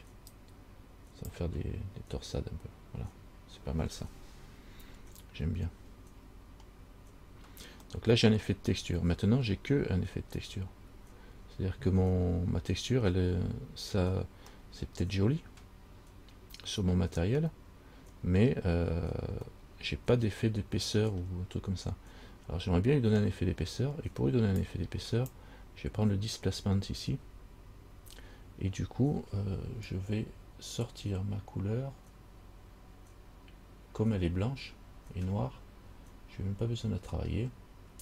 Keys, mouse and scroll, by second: 0.5 click, 6.9 scroll down 1, 8.2 middle click, 10.3-10.6 scroll up 2, 11.3 scroll up 1, 14.9 middle click, 20.1 middle click, 25.0 click.